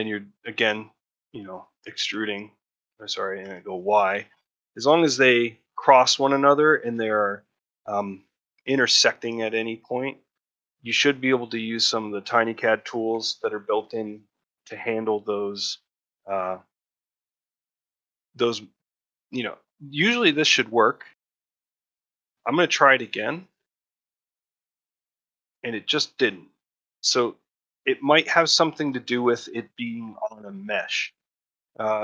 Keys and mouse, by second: 3.5 e, 4.7 middle click, 5.0 ctrl+middle click, 6.0 ctrl+middle click, 6.3 middle click, 6.7 shift+middle click, 7.1 ctrl+middle click, 7.5 middle click, 9.9 middle click, 13.0 2, 17.2-23.3 right drag, 26.0-27.3 middle drag, 28.4 ctrl+middle click, 28.8 shift+middle click, 29.1 ctrl+middle click.